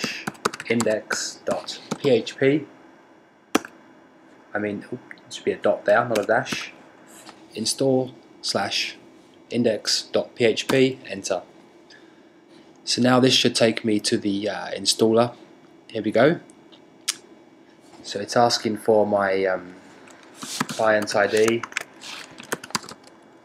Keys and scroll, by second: 0.0-2.4 typing, 3.4 Return, 6.0-6.4 typing, 10.5 Return, 20.0-23.4 typing.